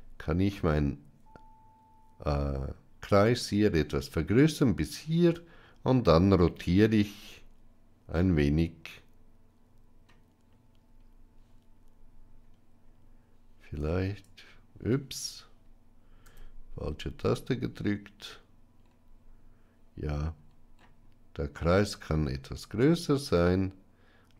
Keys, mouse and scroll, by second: 16.1 r.